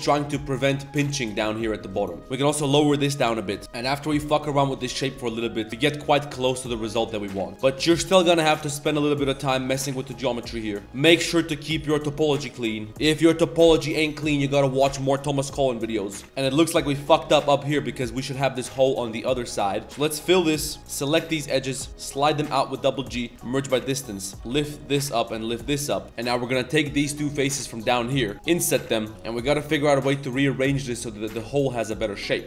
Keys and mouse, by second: 0.5 drag, 0.8 Tab, 1.5 click, 1.9 click, 2.1 middle click, 2.2 g, 2.3 middle click, 3.9 middle drag, 4.1 shift+middle click, 4.4 Tab, 4.4 middle click, 4.7 middle click, 5.0-5.7 middle drag, 5.0 z, 5.7 Tab, 6.1 click, 7.4 click, 8.9 middle click, 10.5 middle click, 10.8 g, 10.8 1, 11.1 Tab, 11.2 middle drag, 11.5 ctrl+s, 11.7-12.3 middle drag, 12.5 middle click, 13.0 drag, 13.1 middle click, 16.2 shift+Tab, 16.2 shift+middle click, 16.4 middle drag, 17.2 click, 17.7 shift+click, 18.3 middle click, 18.7 middle click, 19.4 middle click, 20.0 click, 20.0 f, 20.3 shift+click, 20.8-21.3 alt+shift+drag, 20.8 2, 23.0 a, 23.3 m, 24.3 z, 24.3 1, 24.3 g, 25.2 click, 26.0 Tab, 26.0 ctrl+z, 26.0 middle click, 26.2 shift+middle drag, 26.4 middle click, 26.7 click, 27.0 shift+click, 27.5 click, 27.9 middle click, 29.0 middle click, 29.1 ctrl+z, 29.1 g, 30.7 click, 31.2 3, 31.5 shift+click, 31.8 middle click.